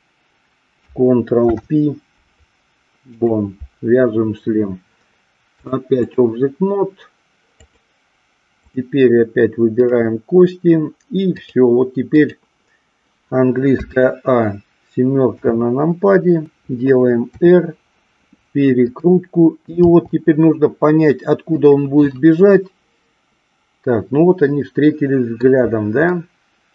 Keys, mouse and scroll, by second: 1.4 ctrl+p, 5.4-6.2 drag, 7.6 click, 9.8 click, 11.3-12.3 drag, 15.3 KP_7, 17.3 r, 19.0 click, 19.8 g, 21.6 click, 22.2-25.4 middle drag, 26.1-26.7 middle drag.